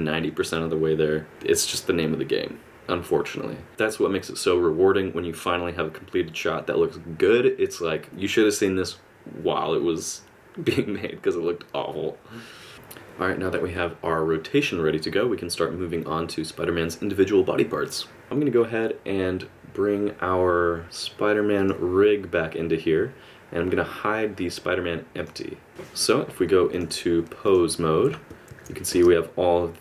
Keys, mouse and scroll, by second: 3.7 alt+a, 12.7 space, 21.6 click, 25.2 click, 26.7 click, 28.5 alt+a, 28.9 space.